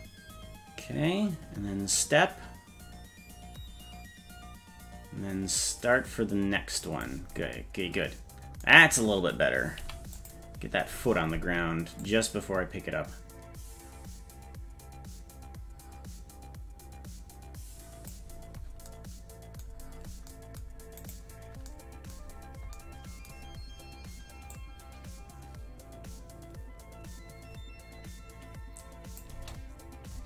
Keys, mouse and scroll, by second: 9.8 i, 12.0-18.1 drag, 19.8-20.3 scroll down 3, 21.1 right click, 24.5-29.2 drag, 29.3 space, 30.1 space.